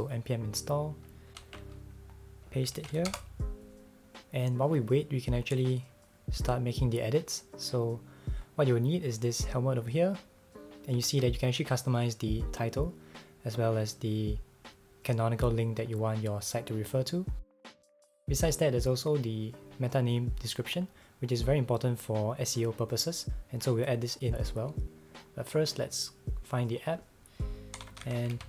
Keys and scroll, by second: 1.4 super+c, 2.7 super+v, 3.1 Return, 11.0 super+c, 27.5-28.4 typing.